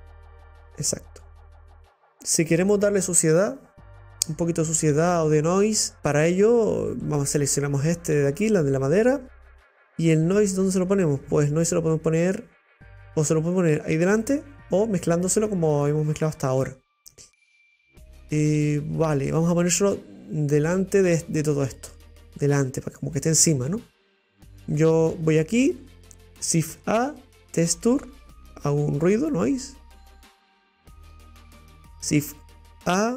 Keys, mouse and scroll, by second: 6.0 shift+scroll up 1, 7.2 right click, 8.3 click, 12.3 click, 17.1 click, 30.2 click.